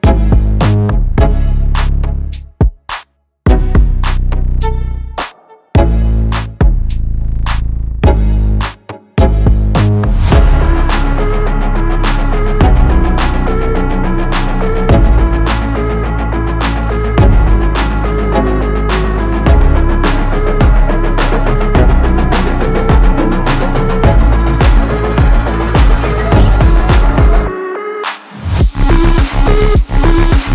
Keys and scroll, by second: 8.2 KP_0, 8.3 KP_Decimal, 8.7 KP_6, 19.9 ctrl+KP_Add, 20.4 KP_Add, 22.0 ctrl+KP_Add, 23.5 ctrl+KP_Add.